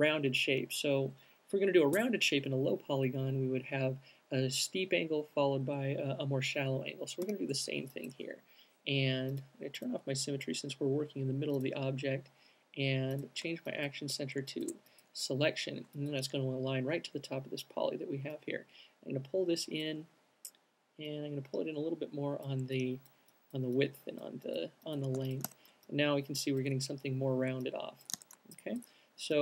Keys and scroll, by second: 7.6 r, 25.3 alt+Tab, 28.5 Tab.